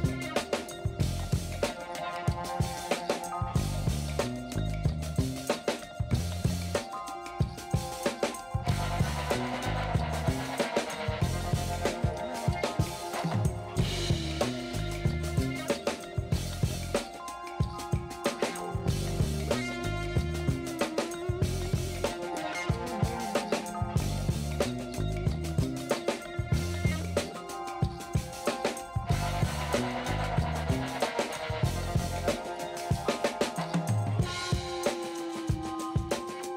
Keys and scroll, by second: 1.6 [, 2.3 ], 2.6 ctrl+alt+z, 3.0 2, 7.0 space, 7.8 space, 9.6 space, 12.7 space, 16.8 ctrl+alt+z, 16.8 ctrl+space, 17.1 ctrl+space, 17.4 [, 20.3 space, 20.7 s, 21.6 ctrl+alt+z, 22.2 ctrl+alt+z, 22.7 r, 24.3 space, 26.3 space, 29.3 ctrl+alt+z, 29.8 ], 31.6 space, 33.0 ctrl+alt+z, 35.9 space.